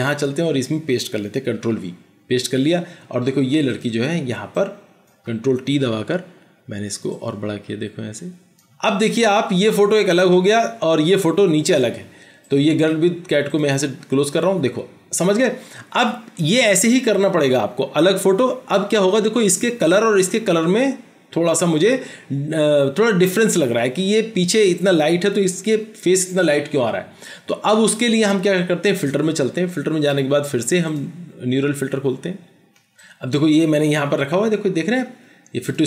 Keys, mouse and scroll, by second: 1.7 ctrl+v, 5.3 ctrl+t, 8.2 Return.